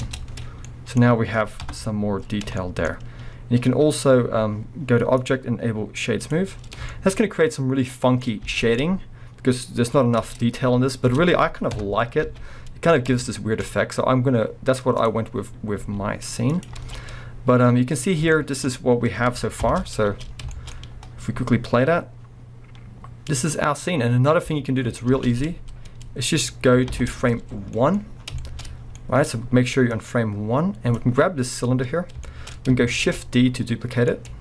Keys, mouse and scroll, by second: 0.0 Tab, 0.3 scroll down 1, 0.6-2.4 middle drag, 1.6 KP_0, 2.3 scroll up 1, 2.6-5.2 shift+middle drag, 3.0-5.2 scroll up 1, 5.2-7.0 drag, 6.9-8.6 shift+middle drag, 7.2 scroll up 1, 7.7 scroll down 1, 8.5 alt+a, 8.6 scroll down 1, 8.8-9.7 middle drag, 9.7 scroll up 1, 10.2 b, 11.1 Tab, 11.7 KP_0, 12.3 alt+a, 12.3-15.0 middle drag, 12.5 scroll up 1, 15.0 click, 15.2-15.8 middle drag, 15.2-15.8 scroll down 1, 15.8 s, 16.6 click, 16.8 alt+a, 16.9-18.3 scroll up 2, 18.4 shift+middle drag, 19.6 shift+Left, 20.1 space, 20.3 scroll down 2, 20.7 scroll up 2, 25.1 space, 26.9 shift+Left, 27.6 scroll down 1, 27.7 middle drag, 28.2-29.9 shift+middle drag, 28.2 scroll down 1, 28.7 scroll up 1, 29.9-31.7 drag, 31.2-31.6 scroll up 2, 32.2-34.3 shift+middle drag, 33.0 shift+d, 34.3 right click.